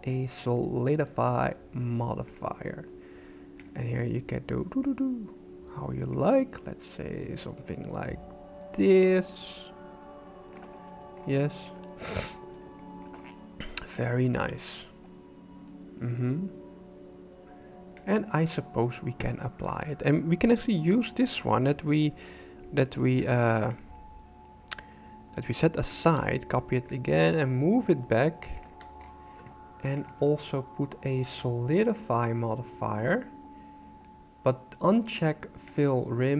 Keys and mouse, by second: 3.6-10.6 shift+drag, 12.8 shift+middle click, 13.9 shift+middle click, 18.0 click, 19.7-21.4 right drag, 23.3 click, 25.9 shift+d, 27.0-28.6 ctrl+drag, 30.0-32.0 drag, 35.7 click.